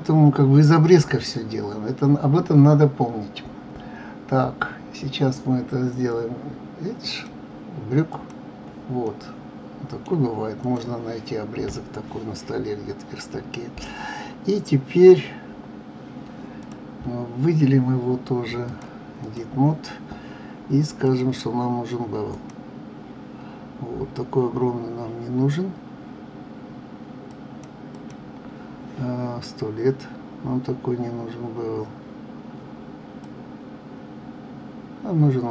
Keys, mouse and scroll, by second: 7.1-9.0 drag, 9.0-10.6 middle drag, 10.6 click, 16.6 click, 18.6-24.0 drag, 27.2 click, 27.9 click, 33.2-35.5 drag.